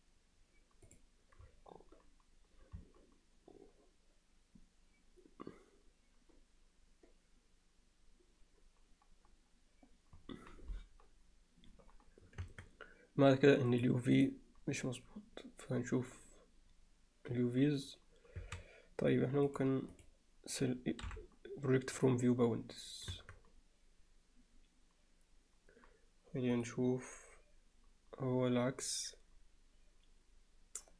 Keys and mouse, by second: 12.5 Tab, 18.4 a, 19.6-20.1 drag, 21.1 u, 23.7 Tab.